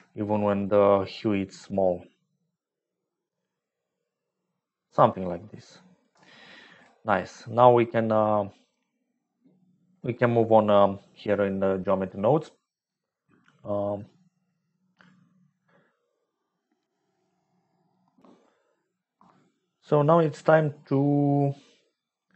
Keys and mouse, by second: 0.5 shift+middle click, 0.8-2.0 shift+drag, 2.0 shift+right click, 2.6-6.0 shift+drag, 9.5 click.